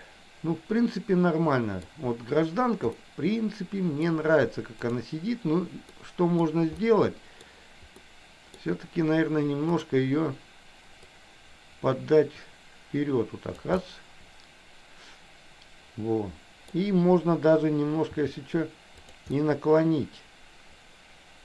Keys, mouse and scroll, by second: 3.0-4.2 middle drag, 6.1 middle click, 6.9 middle click, 8.1 middle click, 9.8 click, 11.2 click, 11.5-13.8 drag, 13.9 scroll up 1, 14.1-16.8 middle drag, 16.8 scroll down 1, 18.2 r, 19.4-21.4 middle drag.